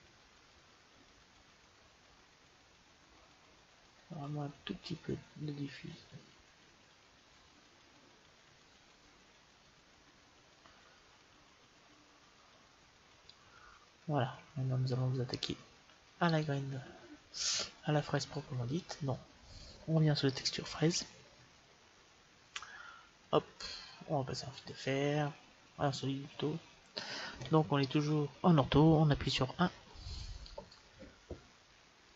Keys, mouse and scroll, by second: 13.8 middle click, 14.1-16.4 middle drag, 16.4-18.2 right drag, 18.8-20.5 drag, 22.7-23.9 scroll down 1, 24.5-26.4 drag, 29.5 KP_1, 31.9-32.1 drag.